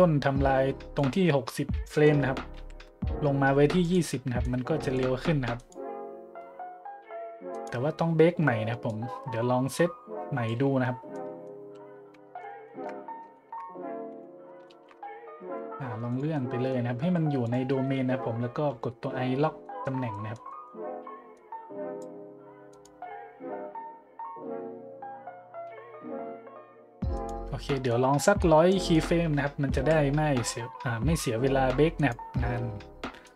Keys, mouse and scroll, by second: 0.9 right click, 2.5 g, 3.8-4.2 drag, 4.4-4.9 drag, 5.6 click, 7.5-7.9 drag, 8.9-10.5 drag, 11.1 middle drag, 12.1-12.8 typing, 12.6-13.0 shift+middle drag, 13.3-13.7 shift+middle drag, 14.1 n, 15.4 g, 16.1-16.4 drag, 17.0 g, 17.4 click, 18.7 i, 19.6-20.0 middle drag, 20.1-20.4 middle drag, 20.5-20.8 middle drag, 21.3-22.0 drag, 22.7 click, 27.1-27.5 drag, 27.9 drag, 28.8 click, 29.7 g, 31.9 click, 33.2 click.